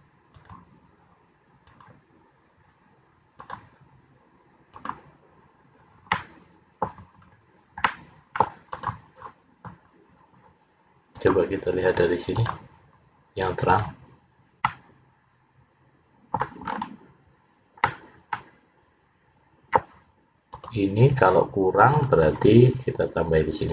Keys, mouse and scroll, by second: 6.3 middle click, 7.3-8.0 scroll up 2, 8.0 middle click, 8.0 scroll up 1, 8.8 click, 11.3 click, 14.8 middle click, 16.8-17.3 scroll up 1, 17.3 scroll up 5, 18.0 middle click, 20.6 click, 22.0 click.